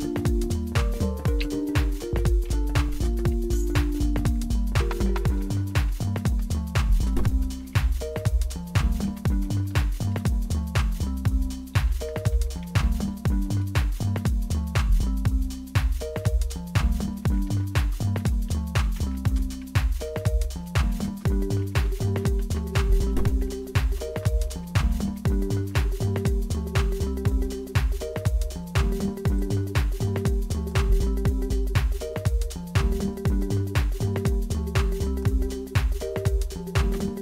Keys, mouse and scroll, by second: 1.0-3.4 typing, 5.2-13.9 typing, 16.9-26.6 typing, 29.4-31.5 drag, 32.4 click, 34.2 click, 35.0 click, 36.9 Return.